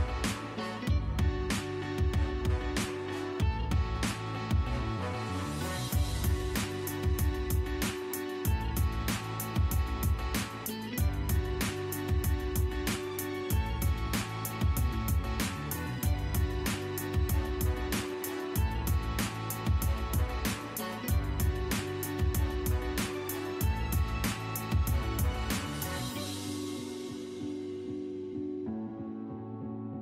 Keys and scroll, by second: 0.3 l, 0.5 space, 2.6 Escape, 4.2 m, 4.3 space, 6.0 d, 6.5 i, 7.1 v, 7.3 Return, 10.5 1, 10.9 5, 11.2 Return, 18.6 Delete, 19.7 d, 20.0 i, 20.6 Return, 22.6 2, 22.9 Return, 24.0 l, 24.1 space, 26.9-27.7 typing, 27.9 Escape.